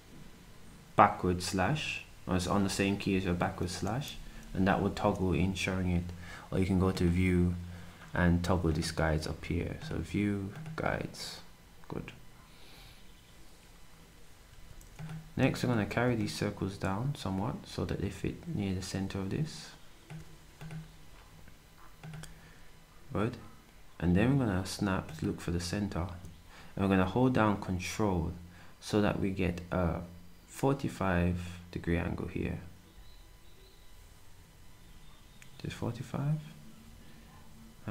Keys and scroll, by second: 14.5 s.